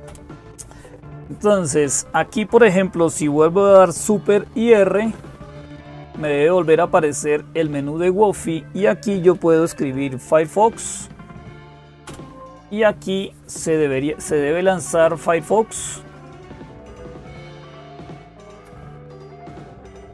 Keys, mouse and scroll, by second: 0.0-20.1 typing.